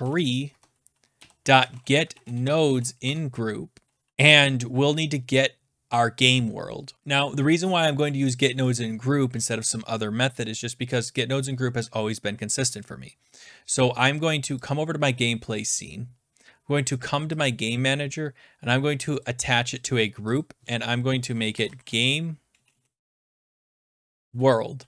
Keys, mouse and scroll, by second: 0.0-3.2 typing, 5.1-5.9 typing, 9.5-14.6 drag, 14.7-18.6 drag, 19.2 click, 19.8 click, 20.4 click, 21.2-24.7 typing.